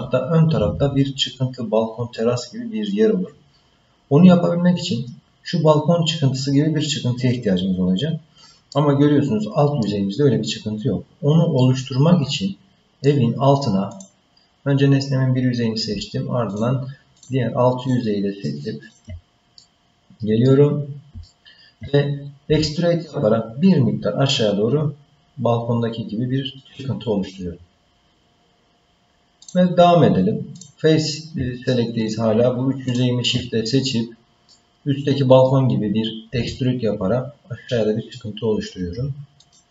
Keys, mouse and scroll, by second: 8.7-9.8 middle drag, 11.6-13.1 middle drag, 13.9 click, 16.5 shift+click, 17.1 shift+click, 17.8 shift+click, 18.3 shift+click, 18.8 shift+click, 19.6 middle click, 20.8 scroll down 1, 21.2 shift+middle click, 22.5 e, 29.4 click, 30.5 click, 32.0 shift+click, 32.8 shift+click, 34.5 middle click, 36.3 e.